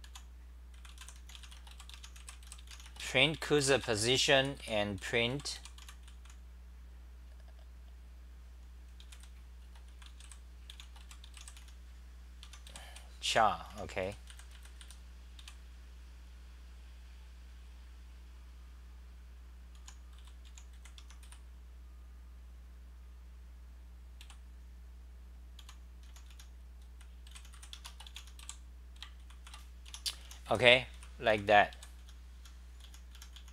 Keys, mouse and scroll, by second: 0.0 u, 3.0 Home, 3.1-6.3 typing, 12.4-15.4 typing, 19.8 u, 21.0 Home, 21.2 g, 24.2 p, 25.6 u, 27.7 Home, 28.4 k, 29.4 ctrl+c, 29.9 Home, 30.0-33.5 typing.